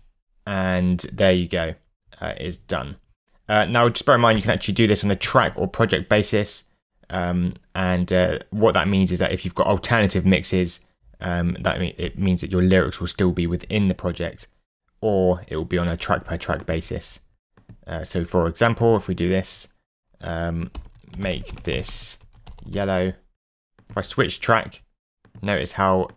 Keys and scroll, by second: 0.0-0.2 typing, 20.4-23.2 typing.